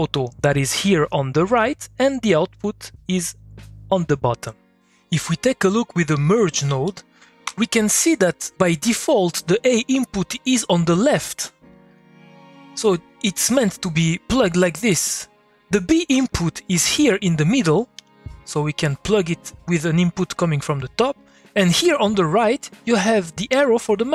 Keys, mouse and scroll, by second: 2.4 click, 6.8 click, 7.4 m, 8.2-11.7 drag, 12.3-14.3 drag, 14.6-16.4 drag, 18.5-24.1 drag.